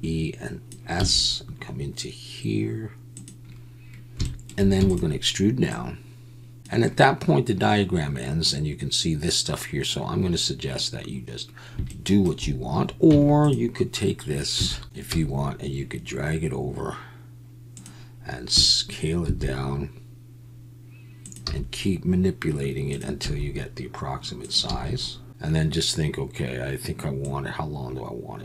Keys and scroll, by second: 1.0 s, 4.8 e, 13.1 Tab, 14.5 Tab, 15.1 g, 19.2 s, 21.4 g, 23.2 s, 24.7 g.